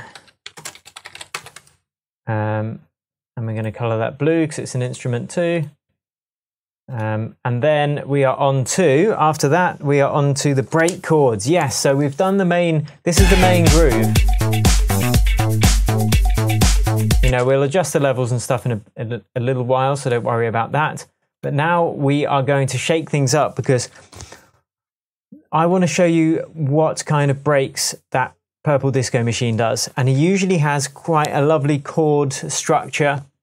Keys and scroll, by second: 0.0-1.6 typing, 13.1 space, 17.2 space, 23.8 super+s, 30.6 super+s.